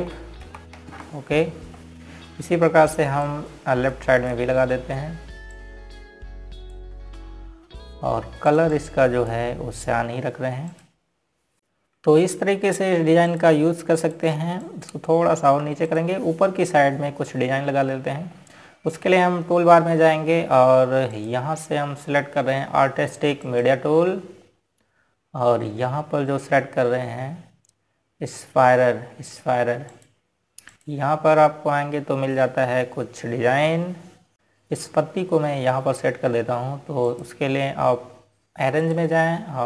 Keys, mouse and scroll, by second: 1.2 KP_1, 2.1 KP_5, 2.6 KP_Enter, 4.9 click, 7.2 click, 8.7-9.3 scroll down 1, 10.2 click, 11.6-13.3 scroll up 1, 15.0 click, 15.7 click, 16.3 click, 17.5 click, 17.9 scroll down 1, 18.5-20.6 scroll up 1, 22.8 click, 31.6 click.